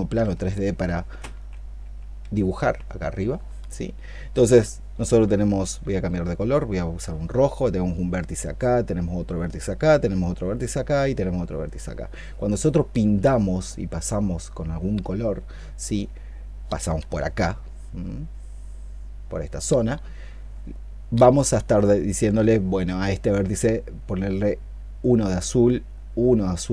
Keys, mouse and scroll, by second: 0.0 ctrl+z, 1.2 ctrl+d, 1.6 ctrl+d, 2.0 ctrl+d, 2.5 ctrl+d.